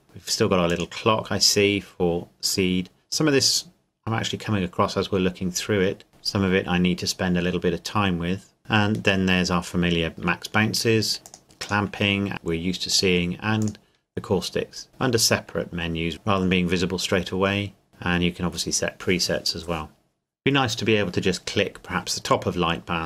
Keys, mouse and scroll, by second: 0.7 click, 8.6 click, 11.2 click, 12.9 click.